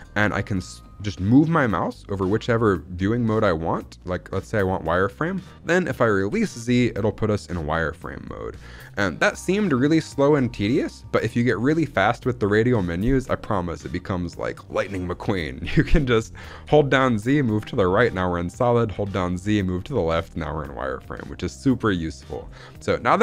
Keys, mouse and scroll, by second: 16.5 z, 18.8 z, 21.8-23.2 scroll up 1.